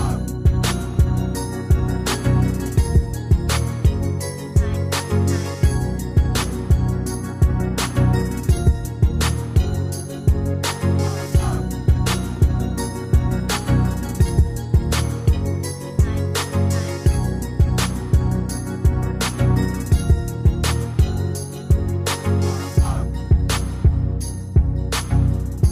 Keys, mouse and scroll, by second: 0.9 shift+click, 20.9 Escape.